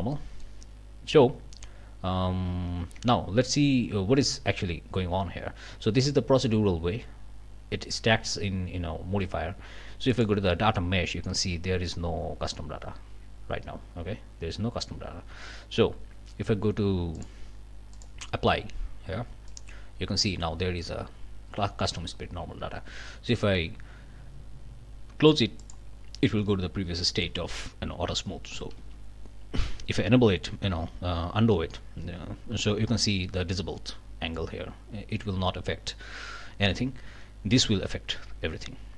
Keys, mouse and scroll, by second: 0.1 click, 2.8 Tab, 10.1 click, 14.1 scroll down 1, 17.1 click, 17.9 click, 19.5 click, 25.6 click, 26.8 scroll down 1, 27.1 click, 28.8 ctrl+z.